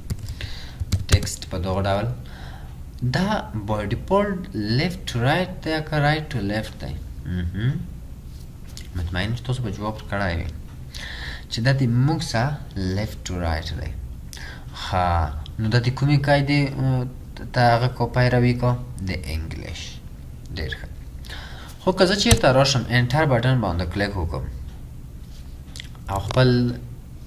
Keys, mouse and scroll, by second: 0.1-1.4 typing, 22.3 Return.